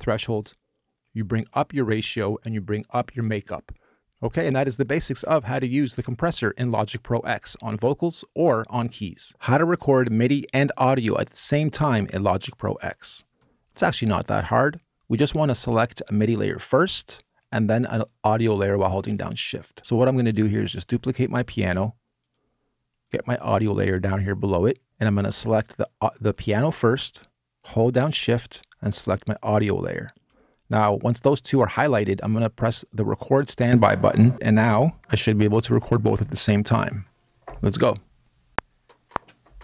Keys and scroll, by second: 38.2 r.